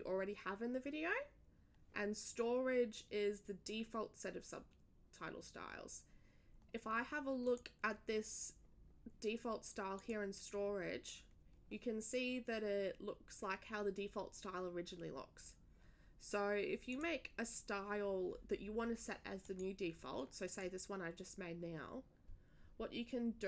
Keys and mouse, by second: 7.4 click, 9.9 click, 16.9 click, 19.4 click, 20.4 click.